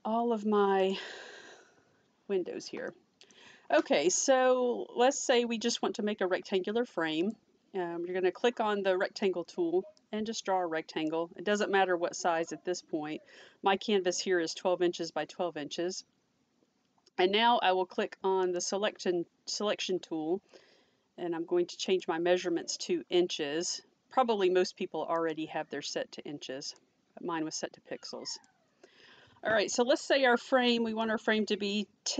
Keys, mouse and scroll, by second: 0.8 click, 2.9 middle click, 7.2 click, 10.0 click, 18.5 click, 21.9 click, 22.4-22.8 scroll up 1, 25.2 click, 26.8 click, 31.1 click.